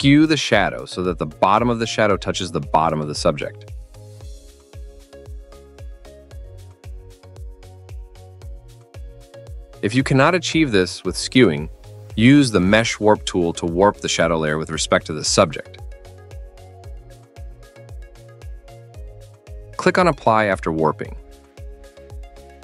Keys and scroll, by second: 13.9 ctrl+z, 15.0 BackSpace, 18.4 ctrl+z.